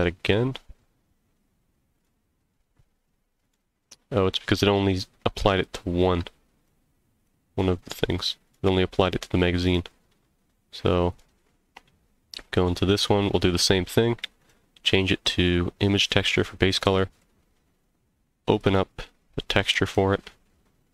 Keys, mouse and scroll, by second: 1.9 click, 3.4 click, 4.6 click, 5.5 shift+click, 6.6 click, 7.1 click, 8.4 click, 9.6 click, 11.1 click, 12.6 click, 14.4-16.1 drag, 17.1 click.